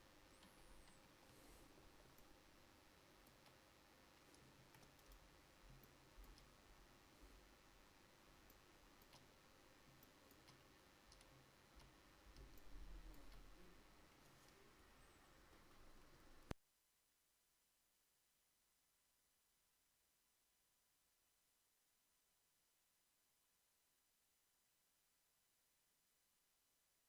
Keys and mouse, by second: 0.5 KP_5, 4.7 ctrl+s.